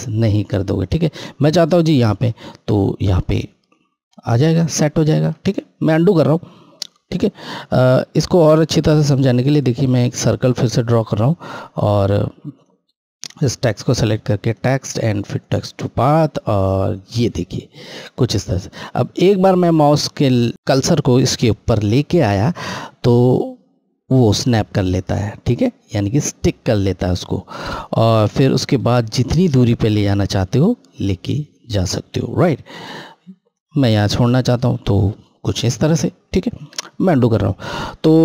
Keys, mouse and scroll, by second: 0.5 click, 0.6 click, 1.7 scroll, 4.5 ctrl+Num_Lock, 4.5-5.1 scroll up 1, 5.1 ctrl+z, 5.9 scroll, 6.1-7.7 scroll down 1, 8.1 click, 8.9 ctrl+click, 10.8 scroll up 1, 12.3 click, 12.4 click, 16.0 click, 33.3 click, 36.3 ctrl+z.